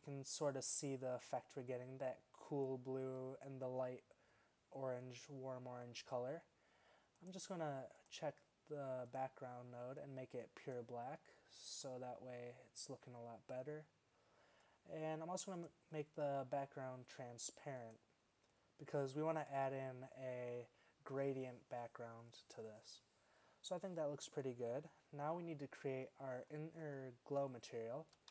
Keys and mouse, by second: 7.3-9.1 drag, 15.7 click, 16.4 drag, 20.8-24.1 middle drag, 26.9 middle click.